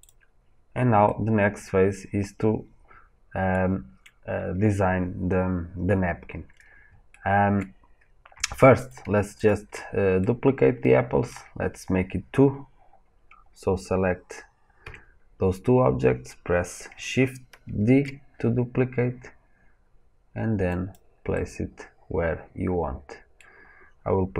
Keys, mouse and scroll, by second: 1.0-8.8 middle drag, 6.4-7.0 scroll down 2, 8.8 click, 9.4 shift+click, 10.0 scroll down 2, 10.1-17.9 middle drag, 14.7 KP_1, 17.9 shift+d, 20.2-24.3 middle drag.